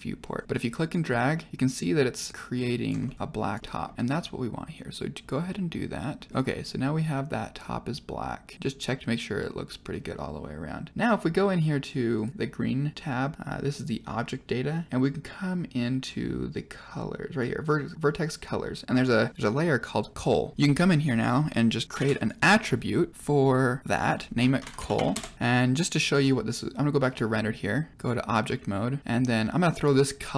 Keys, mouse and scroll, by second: 0.4 click, 1.0 middle click, 1.5-2.8 drag, 3.0 middle click, 3.1 click, 3.6 middle click, 3.9-5.9 drag, 6.4-9.8 middle drag, 11.4 click, 12.1 click, 17.2 click, 20.5 click, 21.0 click, 21.6 click, 21.9 shift+a, 23.9-25.3 drag, 25.4 middle click, 27.2 click, 27.9 drag, 29.7-30.3 drag.